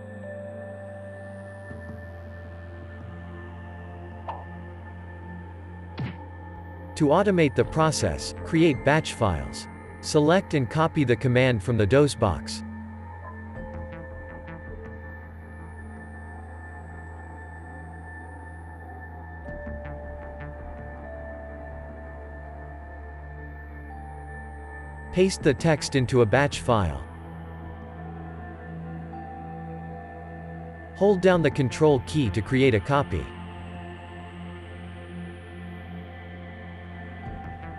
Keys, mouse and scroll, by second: 22.0 click.